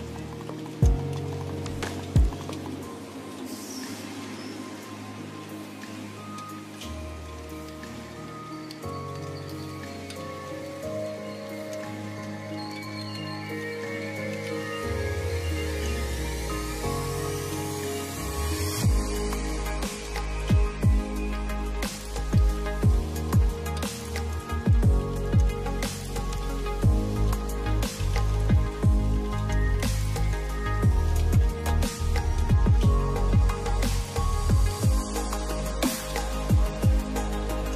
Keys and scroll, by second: 0.9 space, 5.6 space, 17.1 space, 18.9 space, 23.6 space, 26.7 space, 33.1 space, 34.3 space.